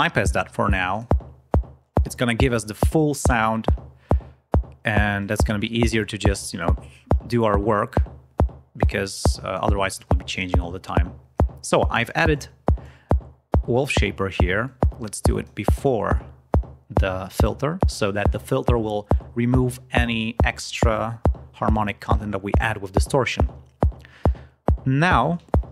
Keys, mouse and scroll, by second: 0.8 click, 5.1 right click, 6.4-7.1 scroll down 2, 9.5 click, 12.2 click, 14.5-15.5 drag.